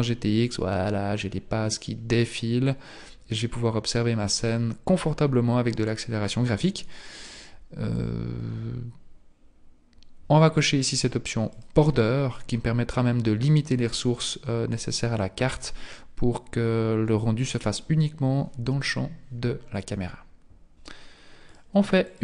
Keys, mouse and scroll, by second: 0.5-1.6 scroll up 1, 1.6-2.0 scroll up 4, 5.1-8.2 scroll down 5, 11.5 click, 21.5 click.